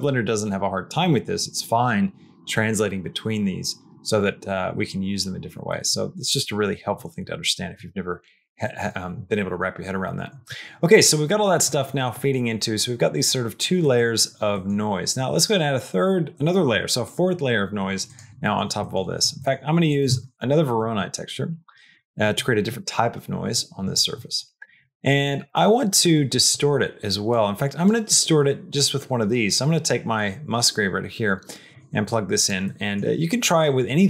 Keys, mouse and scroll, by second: 5.5 middle click, 6.9 middle click, 8.6 middle click, 11.5 middle click, 12.0 middle click, 13.7 middle click, 14.4 middle click, 18.3 middle click, 18.7 middle click, 19.2 middle click, 19.7 click, 20.1 shift+d, 20.9 middle click, 21.7 click, 22.1 middle click, 24.7 click, 25.4 middle click, 27.2 click, 29.4-31.6 drag, 31.9 click, 32.6 middle click.